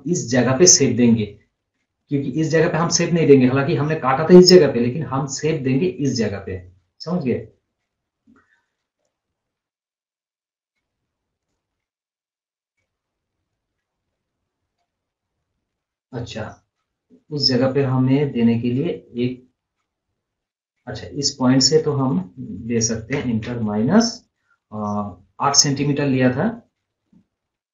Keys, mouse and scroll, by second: 9.0 click, 9.7-10.0 scroll down 1, 10.3 scroll up 1, 10.5-10.9 scroll down 1, 11.4 scroll up 1, 12.8-14.4 drag, 14.4 scroll up 1, 14.6-15.2 scroll down 2, 15.5 scroll up 1, 16.8-24.0 drag.